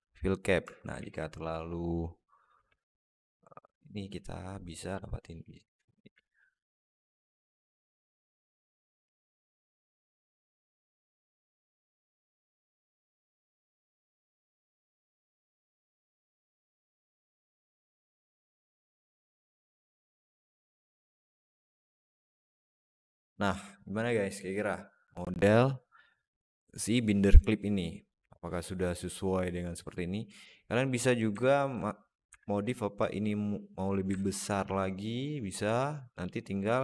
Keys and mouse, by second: 0.5 Tab, 0.8 alt+z, 1.2 click, 2.5 alt+z, 2.8 alt+middle click, 3.8-5.7 drag, 6.1-8.0 alt+middle drag, 9.8 Tab, 10.3 alt+middle click, 10.8 Tab, 11.3 alt+z, 11.7 click, 12.7 a, 13.5 alt+shift+middle click, 14.3 shift+click, 16.0 alt+z, 16.0 alt+middle click, 17.2 click, 17.5 shift+click, 18.4 alt+middle click, 18.9 click, 19.3 alt+middle click, 19.7 Tab, 20.9-21.5 alt+middle drag, 23.0-23.3 alt+middle drag, 23.8-27.2 middle drag, 30.3-30.7 middle drag, 31.2 alt+middle drag, 32.1 s, 34.0 alt+middle click, 34.4 s.